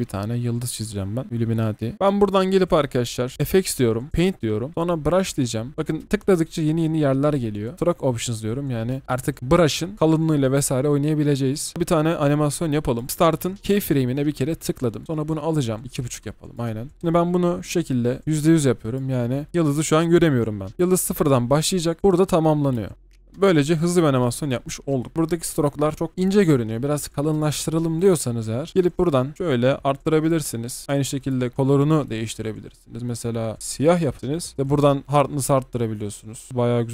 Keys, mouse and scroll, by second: 15.8-19.5 alt+scroll up 1, 25.1 ctrl+z, 34.5 ctrl+z, 36.6 scroll down 1.